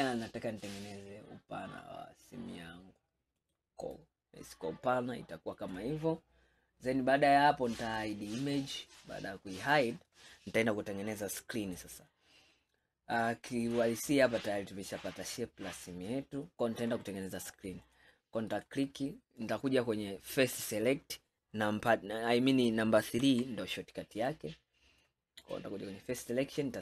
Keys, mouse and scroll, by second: 4.0-7.1 middle drag, 8.0 click, 9.0-10.7 middle drag, 10.7-11.2 scroll down 2, 11.2-13.7 middle drag, 13.7 click, 14.5-17.5 middle drag, 17.9 click, 18.6 click, 19.1-20.5 middle drag, 20.5 click, 23.3 3, 24.3-25.5 middle drag, 25.5 click, 26.7-26.8 middle drag.